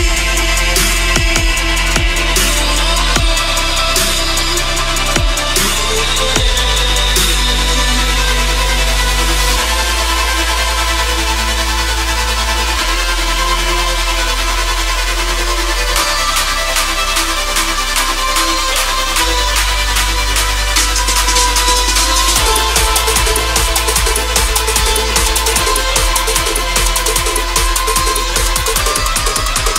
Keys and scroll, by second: 5.1 shift+Page_Up, 6.5 g, 21.7 shift+Page_Down, 22.9 KP_Add.